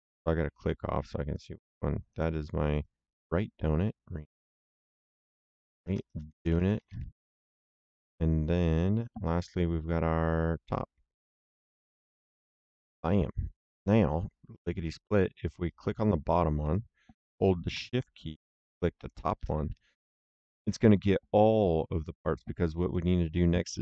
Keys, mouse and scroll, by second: 1.2 click, 2.6 right click, 4.3 click, 4.9-7.3 typing, 9.5 right click, 11.0 click, 11.8-12.7 typing, 15.8 click, 18.9 shift+click, 22.8 middle click.